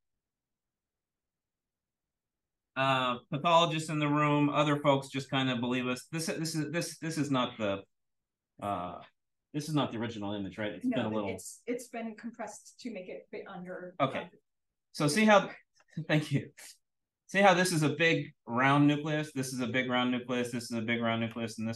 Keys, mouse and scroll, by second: 0.9 click, 1.5 click, 1.9 click.